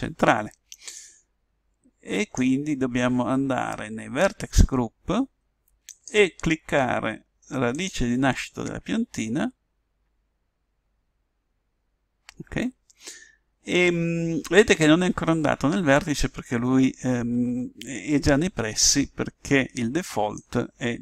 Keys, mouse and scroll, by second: 0.9 click, 5.9 click, 20.3 click.